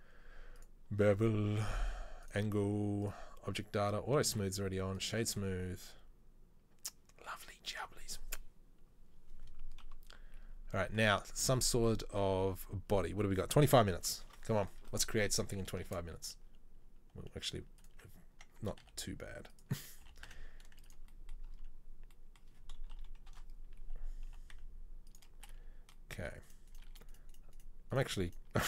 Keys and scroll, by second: 4.5 space, 10.0 KP_3, 14.0 KP_3, 14.4 KP_1, 16.0 shift+a, 18.7 Tab, 18.9 s, 20.2 g, 23.2 KP_3, 23.3 KP_1, 24.4 g.